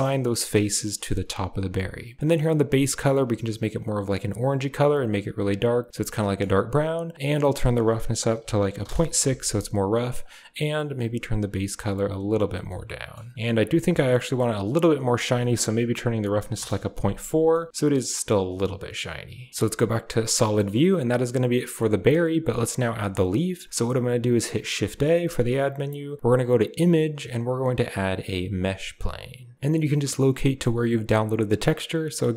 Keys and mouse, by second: 0.6 shift+click, 1.0 Tab, 6.0 click, 7.3-8.7 drag, 10.1 click, 12.7-13.0 middle drag, 15.0-16.5 drag, 17.4-17.9 middle drag, 18.4-19.4 drag, 19.5 z, 20.5 shift+click, 21.5 middle click, 23.1 shift+middle click, 24.6 shift+a.